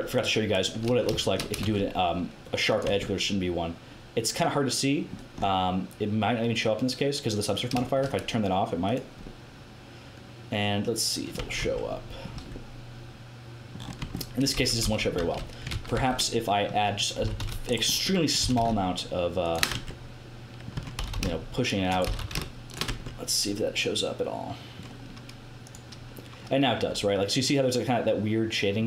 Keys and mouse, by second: 1.2 click, 1.6 ctrl+e, 2.8 Tab, 3.2-4.6 middle drag, 9.3 click, 9.9 click, 10.0-11.2 middle drag, 11.5 Tab, 12.3 Tab, 14.0 Tab, 14.1 middle click, 14.6 ctrl+z, 14.8 ctrl+z, 15.2 ctrl+z, 15.7 ctrl+z, 15.9 ctrl+z, 17.2 g, 17.6 middle click, 18.4 g, 19.7 Tab, 20.7 Tab, 20.9 g, 22.0 g, 22.8 Tab, 26.2 middle click, 26.5 middle click, 26.8 middle click, 28.2-28.8 middle drag.